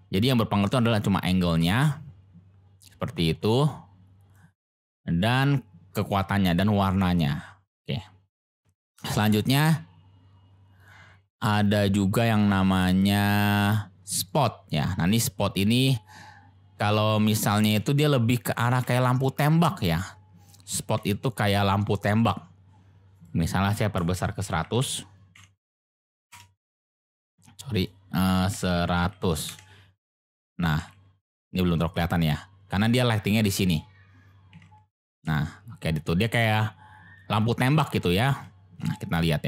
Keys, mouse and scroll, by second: 0.6-4.3 drag, 8.7 shift+a, 15.7 click, 17.0 click, 18.4 click, 18.7 g, 18.7 z, 19.8 click, 20.6 g, 20.9 z, 21.3 click, 23.1-27.0 drag, 24.8 0, 27.8-30.2 drag, 29.0 0, 30.7 g, 30.8 z, 31.4 click, 34.5 g, 34.6 z, 36.3 click, 38.1 shift+click, 38.8 shift+drag.